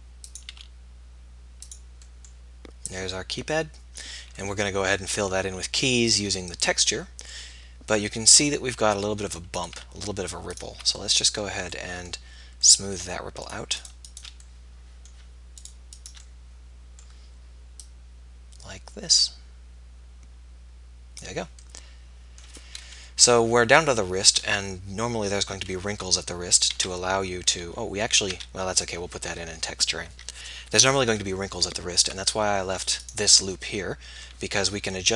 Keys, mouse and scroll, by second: 0.6 s, 7.7 middle click, 11.0 middle click, 11.1 click, 11.2-12.7 middle drag, 14.5-21.7 middle drag, 25.9 KP_1, 26.7 z, 27.5 z, 28.4 z, 30.1 z, 30.7 z, 31.0 z, 33.5 middle click, 34.9 KP_3, 35.0 KP_1.